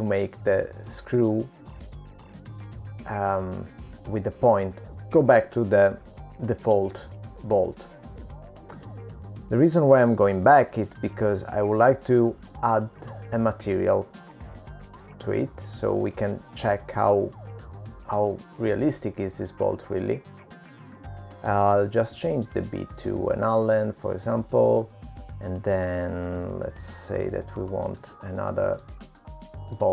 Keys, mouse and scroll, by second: 3.1 click, 3.5 middle click, 8.2-9.7 scroll up 7, 10.0 shift+middle click, 13.9 middle click, 18.3-20.8 scroll up 1, 20.8 middle click, 24.3 click, 26.5 middle click, 29.3 shift+d.